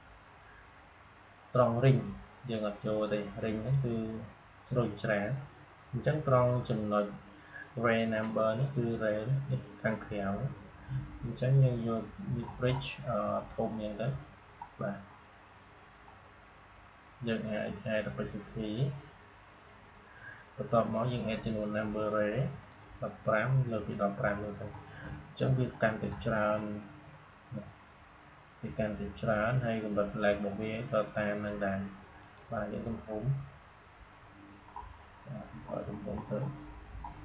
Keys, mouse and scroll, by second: 1.5-6.1 drag, 11.7 click, 12.2 scroll up 1, 13.0 scroll up 1, 17.4 click, 17.8-20.7 scroll up 1, 22.6 click, 23.1-28.1 scroll up 1, 32.1 click, 32.6-34.5 scroll down 1.